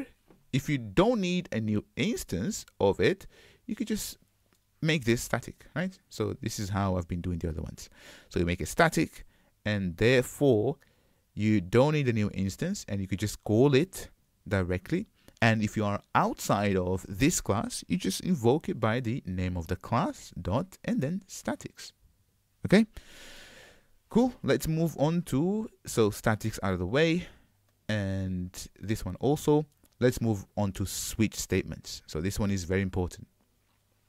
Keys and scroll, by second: 5.7 Return, 19.2 Return, 20.8 Escape, 23.2 alt+BackSpace.